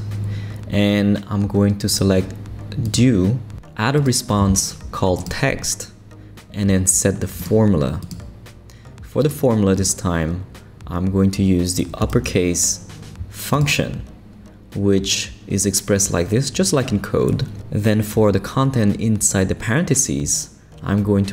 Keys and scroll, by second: 11.8-12.6 typing.